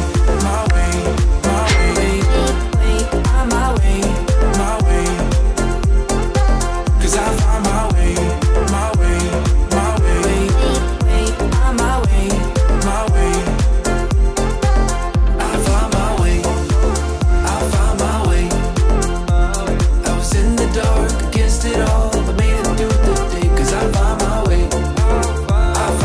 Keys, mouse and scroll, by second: 4.7 1, 4.9 Return, 7.2 2, 7.5 Return, 8.3 click, 9.0-9.7 typing, 10.8-11.6 typing, 12.9-13.6 typing, 15.4 typing, 15.7 click, 18.4 middle click, 20.5-23.2 drag, 23.7 0, 23.9 Return, 25.8-26.0 drag.